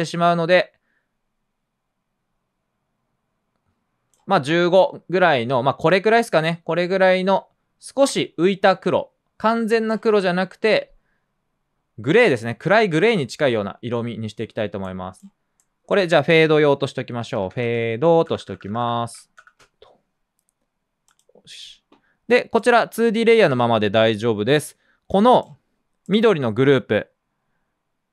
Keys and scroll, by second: 16.9-20.1 typing, 20.1 Down, 20.1 Return, 24.7-25.5 typing.